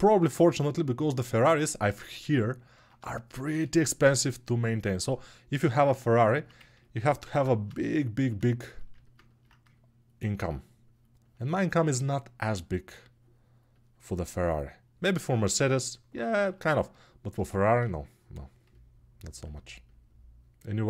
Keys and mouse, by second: 1.6-20.8 alt+drag.